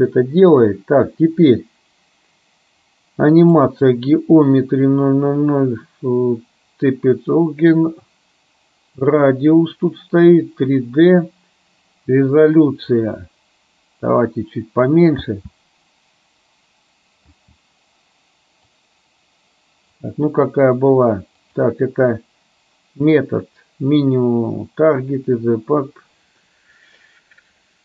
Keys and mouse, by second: 3.6 click, 13.1-14.8 drag, 15.5 space, 17.6 space, 18.9-20.1 drag, 21.6-25.5 drag.